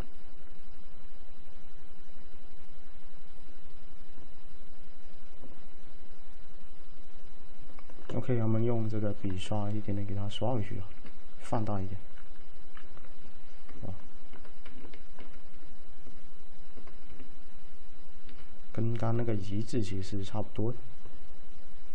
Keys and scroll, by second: 14.1 typing.